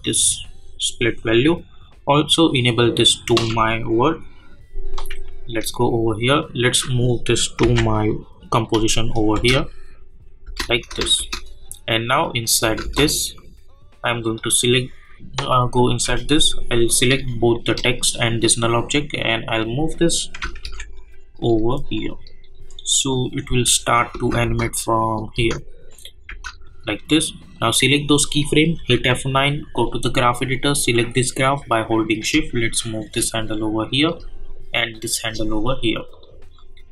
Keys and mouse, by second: 6.3 click, 7.6 [, 9.3 space, 14.3 click, 15.1 click, 17.1 shift+Num_Lock, 17.1 click, 17.5 shift+click, 19.2 click, 20.4 =, 20.6 =, 20.9-23.1 drag, 23.4 space, 26.6-28.8 drag, 28.8 F9, 29.7-34.1 drag, 34.1-36.9 drag.